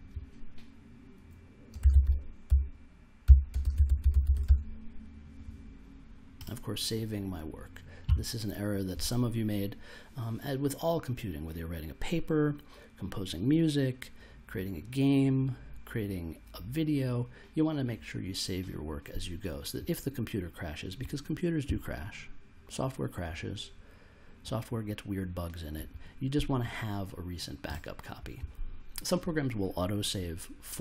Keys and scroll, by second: 1.5-4.9 typing.